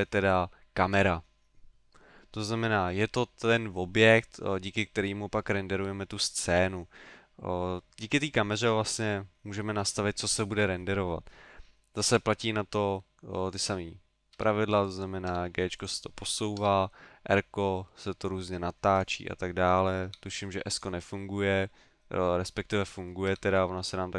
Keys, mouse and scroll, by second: 1.0 right click, 12.1 g, 13.7 click, 14.4 g, 15.0 click, 15.3 g, 15.9 click, 16.6 r, 19.0 right click, 20.1 s, 20.9 click, 22.2 middle click, 22.9 middle click, 23.3 s.